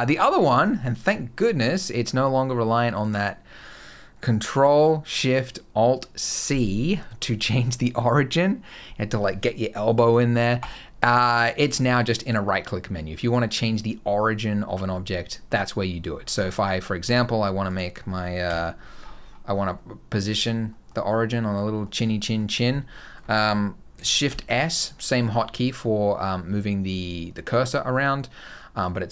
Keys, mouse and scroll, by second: 10.4 right click, 15.9 scroll up 2, 16.3 shift+middle click, 16.9 Tab, 17.5 click, 18.4 KP_Decimal, 18.8-19.6 scroll down 15, 19.6 middle click, 20.1 scroll down 2, 20.5 middle click, 21.1 middle click, 21.9 middle click, 22.3 scroll down 2, 22.6 middle click, 24.1 shift+s.